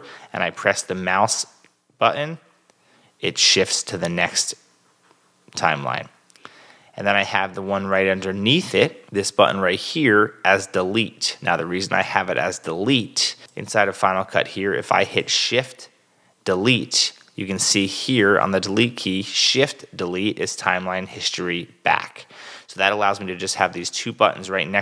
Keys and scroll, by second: 2.3 shift+Return, 8.0 super+Tab.